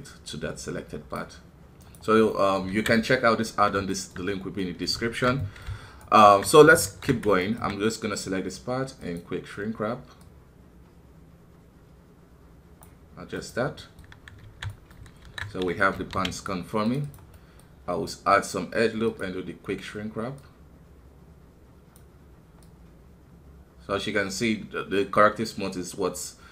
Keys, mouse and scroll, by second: 2.3 middle click, 2.7 alt+a, 2.9-4.2 middle drag, 4.2-4.6 scroll up 1, 5.0 alt+KP_2, 5.4-6.8 middle drag, 6.8 alt+KP_3, 6.9 alt+KP_3, 7.4-11.9 alt+right drag, 11.9-13.8 drag, 13.8 middle click, 14.4 alt+a, 14.7 middle click, 15.2 alt+KP_2, 15.9 ctrl+r, 17.3-19.0 middle drag, 19.0-26.5 drag.